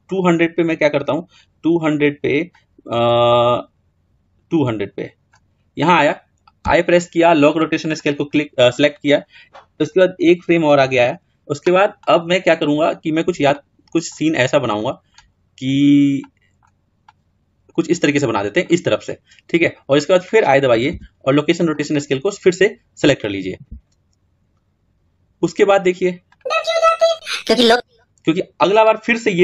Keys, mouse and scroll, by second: 0.4 click, 2.9 click, 10.1-11.8 drag, 11.8-12.9 middle drag, 12.9-13.3 scroll down 3, 13.3-14.1 middle drag, 14.1 scroll up 1, 14.2-15.1 middle drag, 15.1-16.1 scroll up 2, 16.1-20.7 middle drag, 20.7 i, 26.0-29.4 drag.